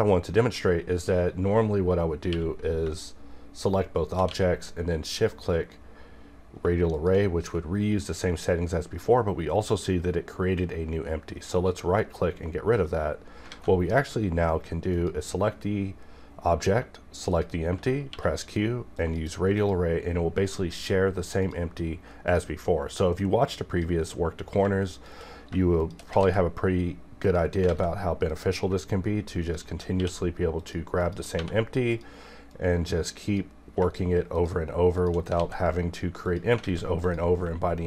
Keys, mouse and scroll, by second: 2.3 q, 4.3 q, 7.0 shift+click, 12.0 right click, 13.5 alt+a, 14.9 click, 17.3 shift+click, 18.1 q, 18.9 click, 20.0-24.9 drag, 25.8 shift+click, 26.2 alt+shift+x, 27.2 click, 27.6 alt+a, 28.3 click, 29.4 shift+click, 29.9 q, 30.6 click, 31.3 1, 31.9-34.3 drag, 35.4 alt+x, 36.2 click, 36.6 alt+a, 37.4 click.